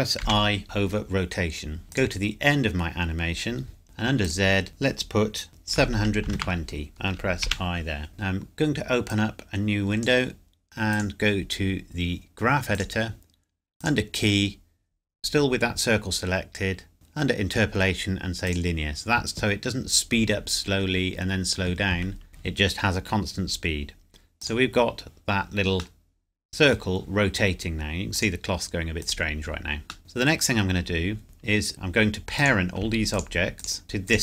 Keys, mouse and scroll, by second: 1.9 click, 3.8 Escape, 4.2 click, 5.7 KP_7, 6.2 KP_2, 6.3 KP_0, 6.9 KP_Enter, 9.1 click, 18.4 click, 20.7 scroll down 1, 21.7-23.9 scroll up 1, 24.3 click, 25.9 middle click, 28.1 click, 30.0-30.3 scroll down 1, 30.3 scroll up 1, 32.3 click, 33.1 shift+click.